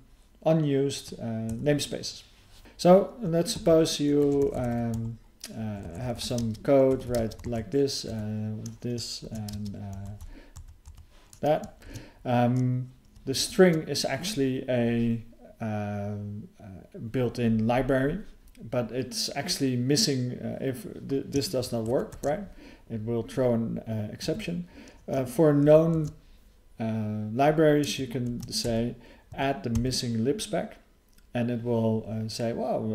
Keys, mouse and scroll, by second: 3.5 (, 5.0 /, 6.9 BackSpace, 7.4 ", 10.0 ", 13.4 alt+f, 22.1 ctrl+e.